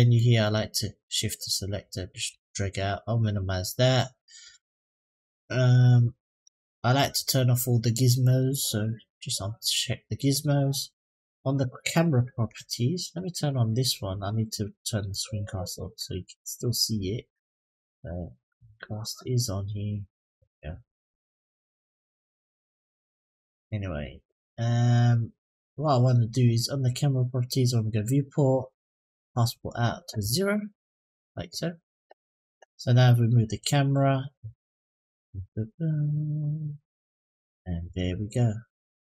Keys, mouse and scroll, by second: 2.0 click, 5.5 click, 8.0 click, 8.8 click, 11.1-11.7 middle drag, 12.0-14.1 scroll up 2, 14.9 click, 18.6 click, 23.0 click, 24.9 click, 26.5 click, 27.6 drag, 28.9 click, 33.2 click, 34.6 click, 35.8-37.8 drag, 38.4 click.